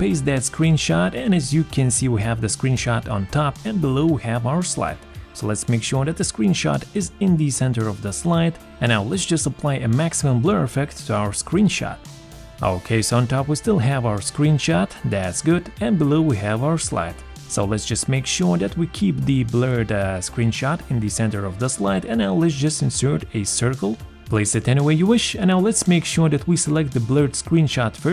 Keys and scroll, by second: 0.3 ctrl+v.